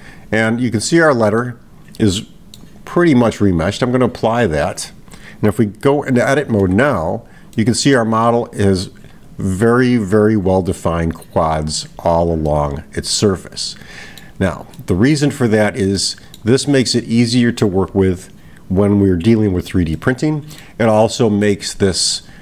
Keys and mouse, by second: 1.5-2.6 middle drag, 3.9 click, 7.5 middle click, 12.5-14.2 middle drag, 14.8 middle click, 16.0-16.4 middle drag, 20.0-20.9 middle drag, 21.4-22.4 middle drag.